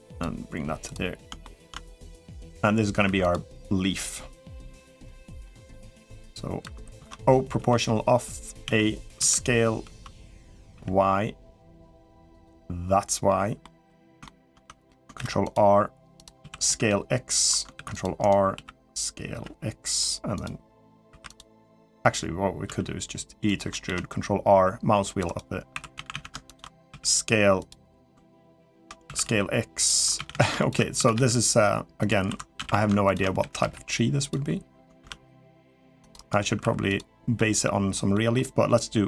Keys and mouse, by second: 0.6 click, 1.2 middle click, 1.9 click, 2.8 3, 3.1-4.8 drag, 5.0 middle click, 5.8 click, 6.7 ctrl+z, 7.4 o, 8.4 a, 9.0 s, 13.4 middle click, 14.0 shift+middle click, 14.4 middle click, 14.9 ctrl+r, 16.2 s, 17.5 ctrl+r, 18.3 s, 20.1 click, 20.9 3, 21.1 click, 22.4 e, 23.6 ctrl+r, 25.5 2, 25.7 a, 25.9 a, 26.7 s, 28.5 ctrl+z, 28.8-30.7 typing, 32.0 2, 32.4 a, 32.5 a, 32.9 alt+shift+click, 33.2 s, 34.8 ctrl+r, 36.4 3, 36.6 click, 37.1 middle click, 37.9 middle click, 38.8 o.